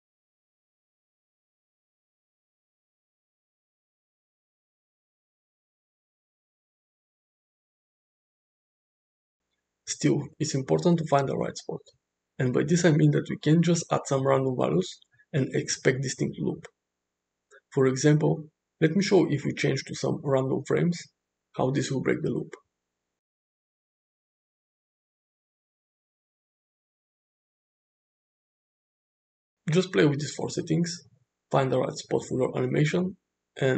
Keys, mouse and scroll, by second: 0.7 shift+Right, 1.8 shift+Left, 2.1 shift+Right, 2.3 shift+Left, 2.5 shift+Right, 2.8 shift+Left, 3.3 click, 4.7 space, 10.3 space, 19.2-20.3 drag, 21.4 shift+Left, 22.8 shift+Right, 25.0 shift+Left, 26.1 shift+Right, 27.0 shift+Left, 27.5 space, 32.9 space.